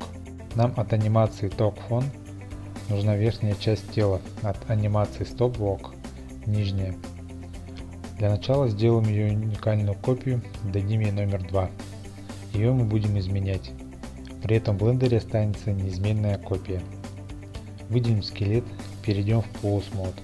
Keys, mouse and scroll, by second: 8.5 click, 9.5 click, 11.6 click, 12.4-14.1 typing, 12.9-14.8 drag, 14.6 Return.